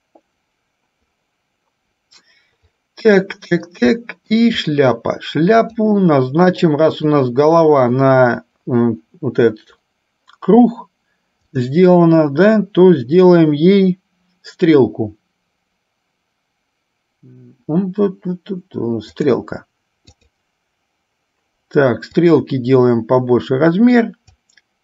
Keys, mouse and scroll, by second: 4.2 shift+middle click, 5.7 click, 6.8 middle click, 11.7-19.5 drag, 20.3 click, 22.2-24.5 drag.